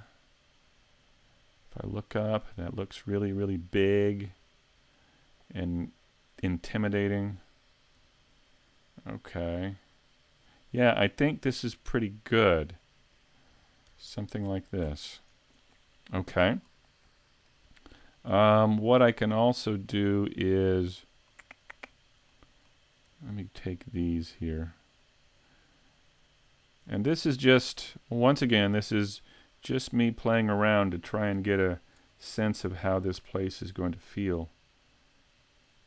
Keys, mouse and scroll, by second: 14.5-15.2 scroll down 7, 15.7 middle click, 16.6 scroll down 2, 17.1 middle click, 18.4 middle click, 19.3 scroll up 4, 19.9 middle click, 21.3 shift+middle click, 22.3 middle click, 23.1 right click, 23.7 shift+right click, 24.2 shift+right click, 24.6 right click, 25.3 right click, 25.7 right click, 26.2 right click, 26.6 shift+right click, 27.0 middle click, 30.7 click, 32.9 click.